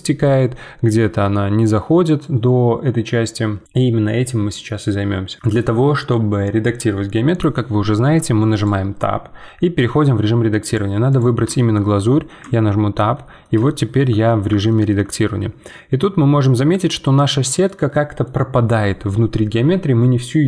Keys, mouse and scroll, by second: 5.3-7.0 middle drag, 8.5-11.0 drag, 11.1 click, 11.5 shift+middle click, 12.4 Tab, 12.9-20.4 middle drag.